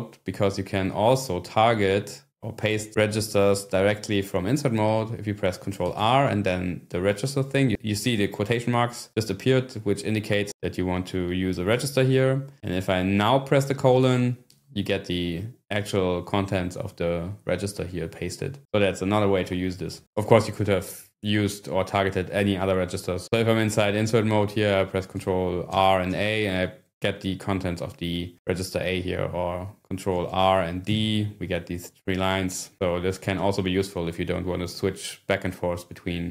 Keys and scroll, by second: 6.1 ctrl+r, 14.0 :, 25.8 ctrl+r, 26.1 a, 30.4 ctrl+r, 30.8 d.